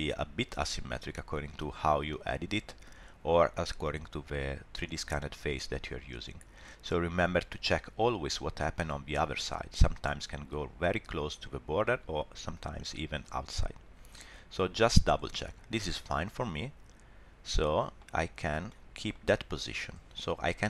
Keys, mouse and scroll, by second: 6.6 middle click, 14.1 middle click, 16.0 middle click, 18.1 scroll down 1, 18.4 shift+middle click, 18.7 middle click.